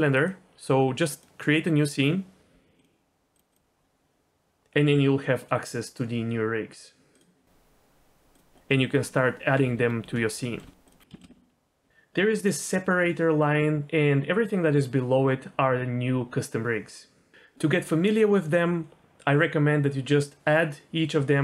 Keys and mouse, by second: 0.3-2.4 drag, 2.8-3.4 drag, 3.5-7.3 drag, 8.3-9.0 drag, 9.2 middle click, 9.7 Tab, 10.0 g, 10.1 x, 10.6 y, 11.1 shift+middle click, 12.6-17.3 drag, 19.0-21.4 drag.